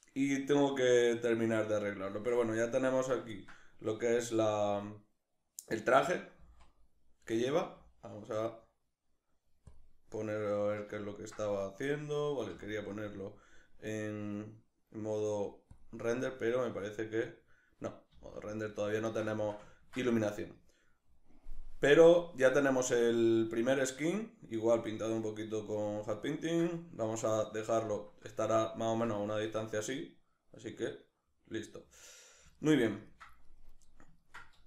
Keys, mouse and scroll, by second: 1.0 middle click, 3.0-15.6 ctrl+shift+middle drag, 18.3-19.9 middle drag, 33.0 ctrl+middle click.